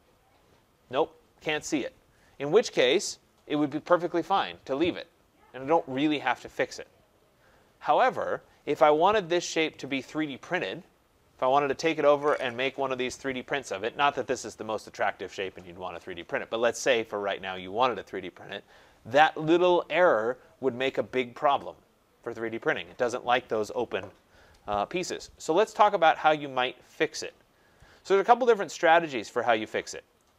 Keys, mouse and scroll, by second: 25.9-27.8 scroll up 7, 27.8 scroll up 1, 28.0 scroll, 28.9 right click, 29.3 scroll.